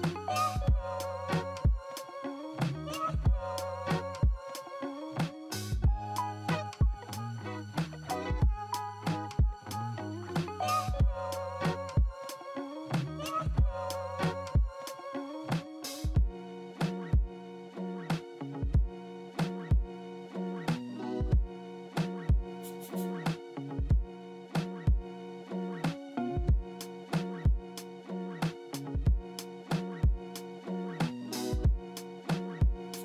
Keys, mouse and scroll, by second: 14.6-17.6 scroll up 1, 17.6-18.6 scroll up 1, 18.7 scroll down 1, 20.3 scroll up 3, 21.0-22.8 scroll down 3, 22.8-23.3 scroll up 3, 23.7 scroll down 3, 24.8-25.3 scroll down 1, 30.1 double click.